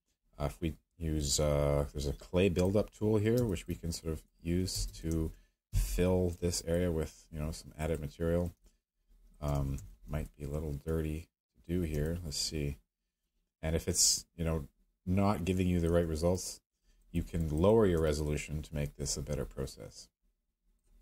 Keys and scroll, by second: 3.4 space, 4.7 space, 5.1 ctrl+z, 5.7-6.3 space, 9.5 ctrl+z, 10.1 z.